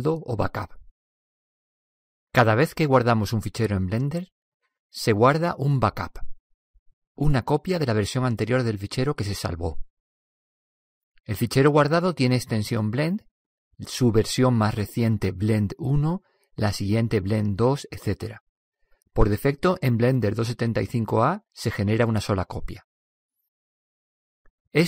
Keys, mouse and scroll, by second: 3.7-10.8 drag, 11.8 click.